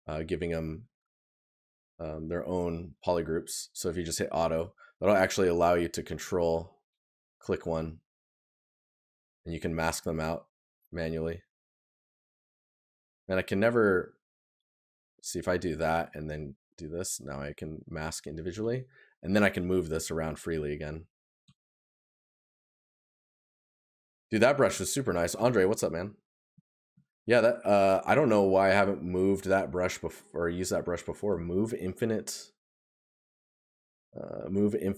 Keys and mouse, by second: 4.6 right click, 17.5 right click, 22.6 right click, 24.0 right click, 26.4 right click.